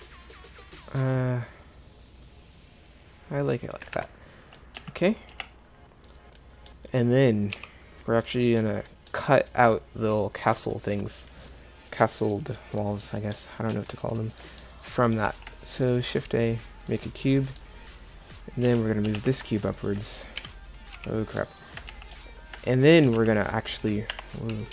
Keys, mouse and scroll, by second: 4.0 Tab, 5.3 z, 7.5 KP_7, 15.3 shift+a, 18.7 KP_1, 19.1 g, 20.4 Page_Down, 21.0 KP_7, 21.9 z, 23.1 g.